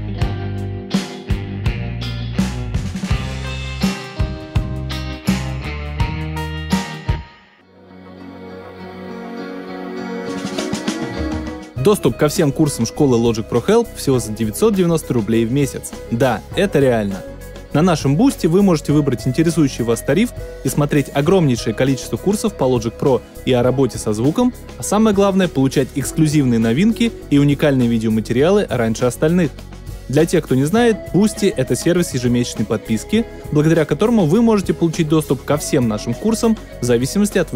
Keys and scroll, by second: 6.7 space.